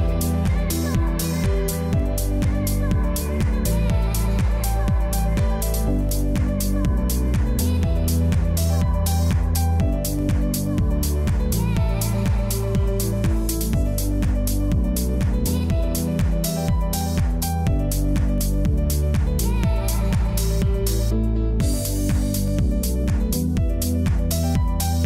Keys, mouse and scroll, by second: 1.0-2.5 typing, 2.0 click, 3.6-8.1 typing, 5.9 click, 6.8 click, 7.5 click, 9.4-11.1 typing, 9.5 click, 10.3 click, 10.9 click, 12.4-14.0 typing, 12.7 click, 15.2-16.1 typing, 15.5 click, 16.2 click, 17.5-20.5 typing, 17.5 click, 18.2 click, 20.8 click, 23.0 space, 23.1 click, 23.5 space, 23.8 click, 24.1 space, 24.4 click, 24.6 space.